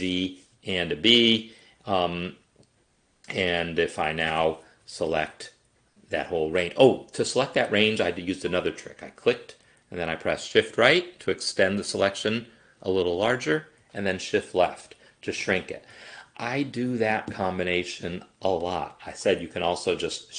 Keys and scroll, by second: 4.7 shift+Right, 5.0 shift+Left, 10.5 shift+Right, 13.9 shift+Left.